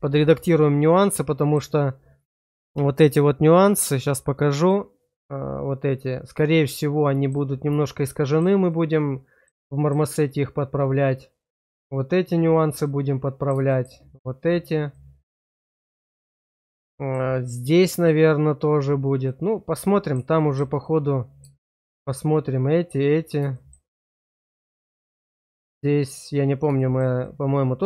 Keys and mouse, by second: 0.7 middle click, 3.6 click, 4.6 click, 6.6 middle click, 7.9 shift+middle click, 8.6 middle click, 9.7 shift+middle click, 10.2-11.5 middle drag, 12.8 middle click, 13.6 shift+middle click, 14.9-17.0 middle drag, 19.2 middle click, 20.3 shift+middle click, 20.7 middle click, 21.5 shift+middle click, 23.5 shift+middle click, 23.9 middle click, 26.7 shift+middle click, 27.1 middle click.